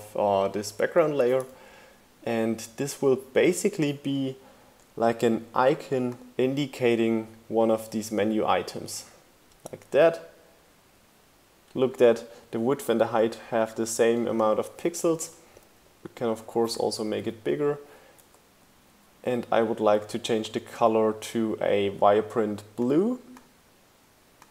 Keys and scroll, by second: 1.4 shift+Down, 2.1 shift+Right, 16.8 Up, 18.4 Up.